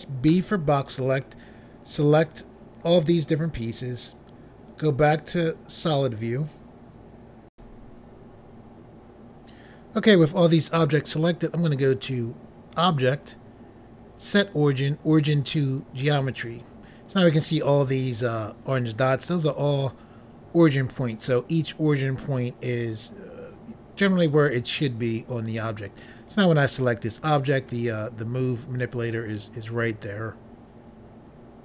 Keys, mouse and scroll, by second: 0.2 b, 0.8 click, 4.6 click, 7.5 Pause, 12.7 click, 15.7 click, 26.1 click, 28.7 click.